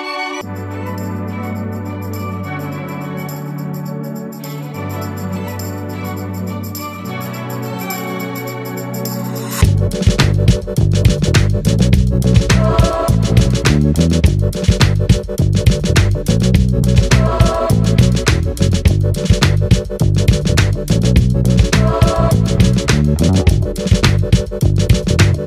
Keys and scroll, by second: 11.0 ctrl+a.